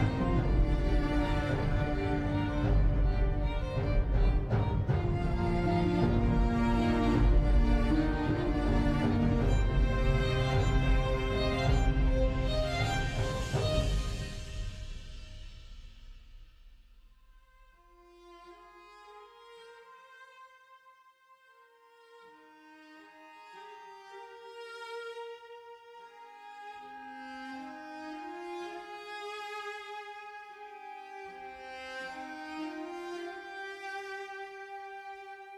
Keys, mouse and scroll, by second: 8.4 typing, 9.0 Return, 17.5 typing, 17.6 Return.